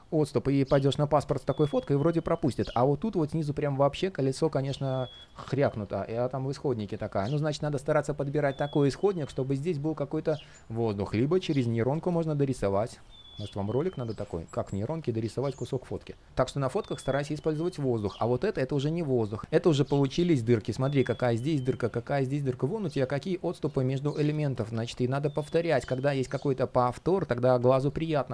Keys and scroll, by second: 21.2 super+z, 27.3 super+z.